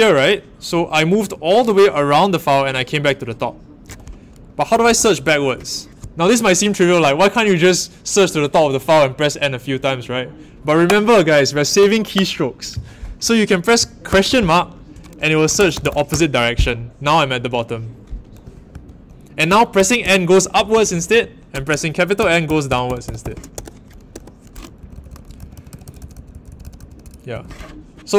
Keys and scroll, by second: 4.0-5.3 typing, 14.0 shift+/, 15.2-16.3 typing, 18.4-27.7 typing.